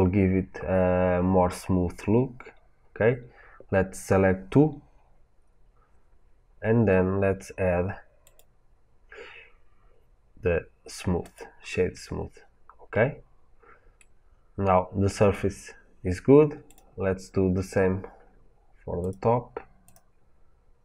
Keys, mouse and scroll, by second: 8.1-13.9 drag, 12.1-13.9 scroll up 2, 13.9-16.6 middle drag, 16.6 click, 18.9 click, 19.7-20.8 drag.